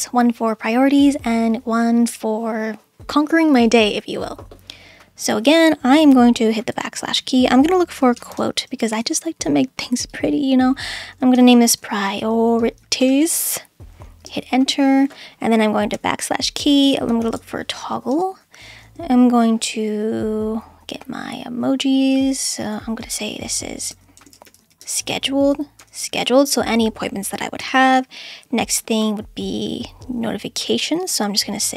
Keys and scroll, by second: 6.7 /, 7.8-9.2 typing, 11.1-13.7 typing, 14.2 Return, 16.0-17.8 typing, 18.1 Return, 23.9-26.7 typing, 27.6 Return.